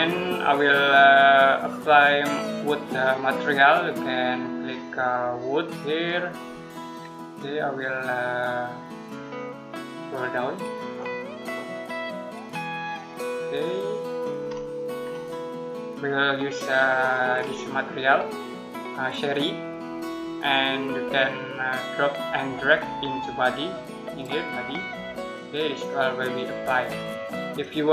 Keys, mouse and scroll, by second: 1.4 click, 6.3-8.4 scroll down 1, 10.8 click, 14.3-14.7 scroll up 1, 14.7-15.4 scroll down 1, 16.8 click, 17.2-19.4 scroll up 1, 22.6 click.